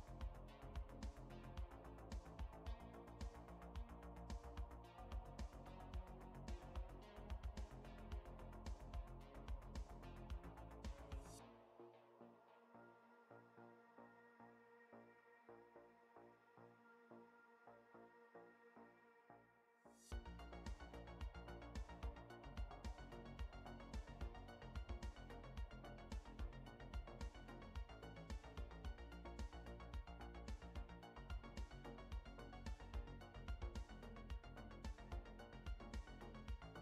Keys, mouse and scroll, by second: 6.6-7.9 typing, 8.8 Left, 9.2 Left, 9.3 Left, 9.7 Left, 10.6 Left, 11.7 Right, 16.9 Left, 17.3 Left, 17.8 Left, 18.4 Left, 24.9 middle click, 25.6 click, 27.9-28.4 scroll down 2, 28.4 scroll up 2, 28.9 middle click, 32.1 click, 36.2 middle click.